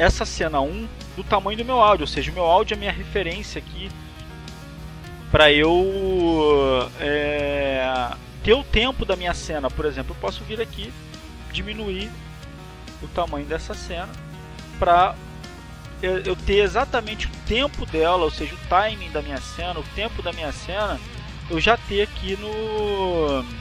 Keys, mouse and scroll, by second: 0.0 click, 1.4-2.6 drag, 3.0 click, 3.5 click, 5.9 click, 6.3 click, 7.4 click, 11.5-12.7 drag, 14.1 click, 15.1-16.6 drag, 18.8 click, 20.2 click, 23.2 click.